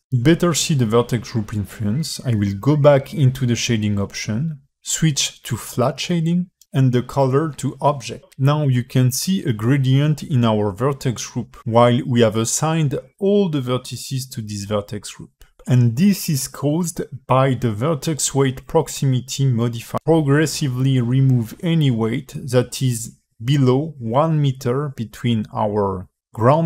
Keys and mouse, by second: 2.9-9.3 drag, 9.6 alt+middle click, 12.0 click, 13.7 alt+middle click.